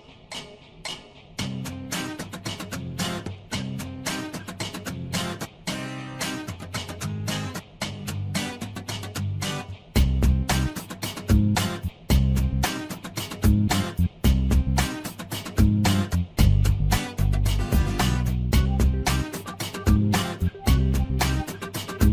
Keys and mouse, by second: 1.6 shift+middle click, 7.0 shift+middle click, 7.7 shift+middle click, 8.4 click, 9.2 shift+middle click, 12.4 shift+middle click, 13.0 click, 15.7 shift+middle click, 16.9-19.4 drag.